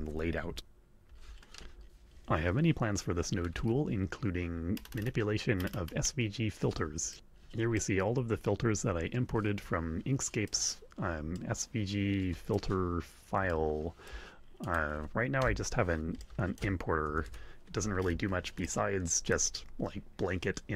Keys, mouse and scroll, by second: 0.3 alt+Tab, 7.1 click, 7.7-10.6 drag, 11.3-12.4 drag, 13.4 click, 14.5 click, 15.4 Tab, 16.2 click, 16.9 a, 17.2 o, 18.6 click.